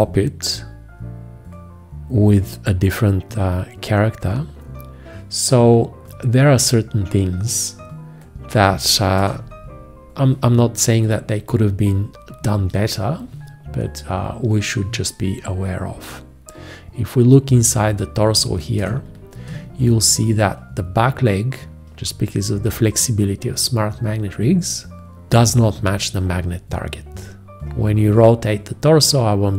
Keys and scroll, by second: 9.5 ctrl+space, 11.6 space, 19.1 ctrl+space, 19.9 space.